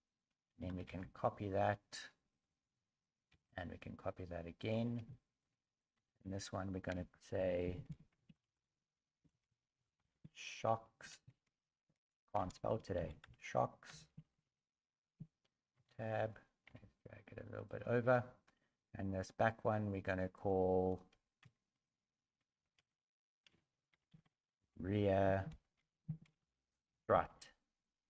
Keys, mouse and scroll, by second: 0.9 shift+d, 3.3 shift+d, 5.1 shift+middle click, 6.0 Tab, 6.9-10.1 typing, 11.2-14.4 typing, 20.9 click, 20.9 right click, 21.4 Tab, 22.8 ctrl+a.